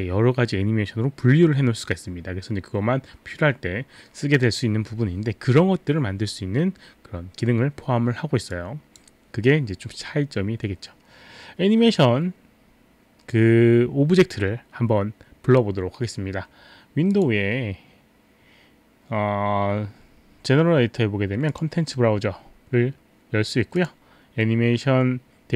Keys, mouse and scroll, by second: 8.5 click, 17.2 click, 21.6 click, 23.7 click.